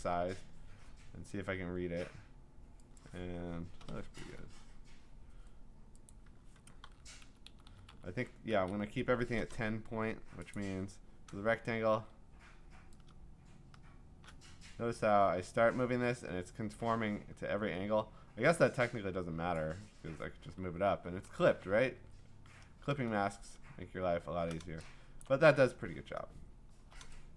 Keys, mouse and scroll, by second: 3.0 click, 3.6-4.4 typing, 6.1 click, 6.8 v, 7.2 Left, 7.5 Left, 7.7 Left, 7.9 Down, 8.6 Left, 10.5 click, 11.9 ctrl+t, 19.5 click, 22.8 shift+Return, 23.5 scroll, 23.7 scroll up 6, 23.8 scroll down 1, 23.9-24.4 scroll down 9, 25.7 click, 25.7 f, 26.4 scroll up 1, 26.5 scroll.